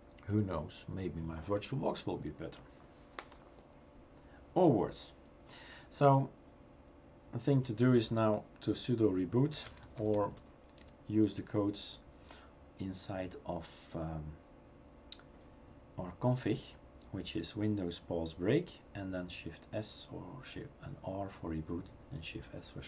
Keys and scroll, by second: 7.7 typing, 9.5-10.8 typing, 11.9 typing.